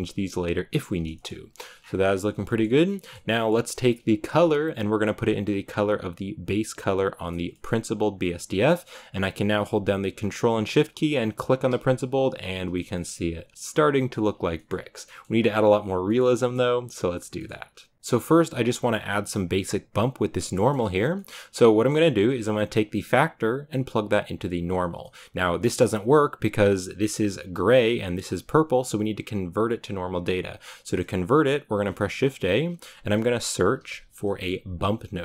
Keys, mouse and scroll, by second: 1.0-3.6 shift+middle drag, 3.6-7.4 drag, 7.4-8.0 middle drag, 8.0-11.4 drag, 12.8 shift+middle click, 13.3 scroll up 1, 13.5-14.3 scroll down 1, 17.9-20.2 drag, 20.4-22.5 middle drag, 22.5-24.8 drag, 27.7-35.2 drag.